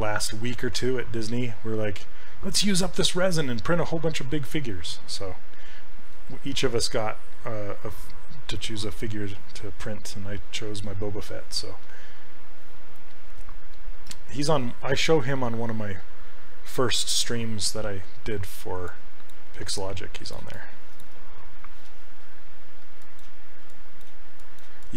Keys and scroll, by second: 19.8 s.